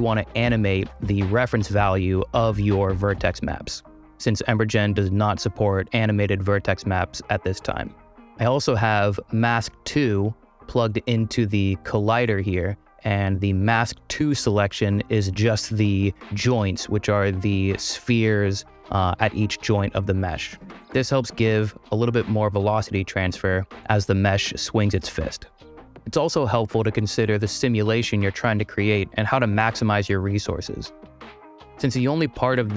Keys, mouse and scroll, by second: 9.3 middle click, 10.5-11.6 drag, 13.5 click.